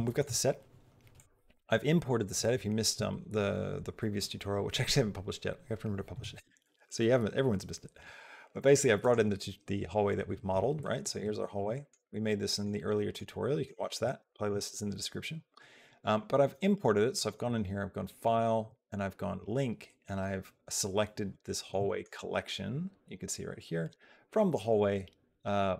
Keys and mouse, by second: 8.9 click, 11.5 shift+middle click, 11.8 middle click, 12.6 middle click, 13.2 click, 14.1 shift+click, 17.1 click, 18.0 click, 21.3 middle click, 21.7 shift+middle click, 24.5 click.